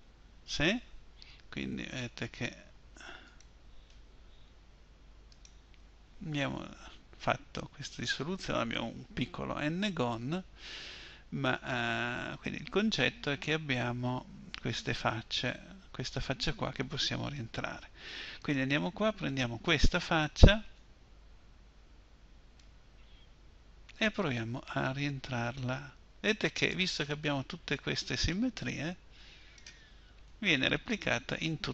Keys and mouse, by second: 3.1-4.3 right drag, 4.3 Delete, 4.3-7.5 drag, 18.3-21.1 drag, 21.1-25.0 middle drag, 25.1-29.4 right drag, 30.4 middle click.